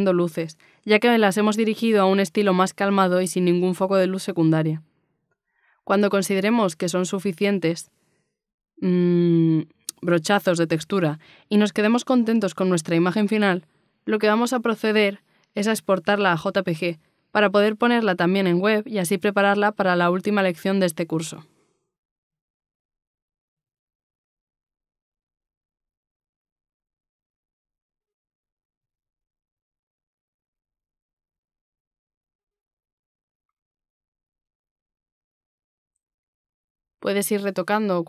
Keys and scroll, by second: 4.5 ctrl+alt+z, 6.7 b, 7.1 b, 7.1 x, 12.5 ctrl+z, 15.2 z, 22.7 z, 24.8 ctrl+alt+z, 26.0 x, 29.0 ctrl+z, 29.9 d, 31.3 ctrl+-, 31.6 i, 32.0 b, 32.1 x, 32.9 z.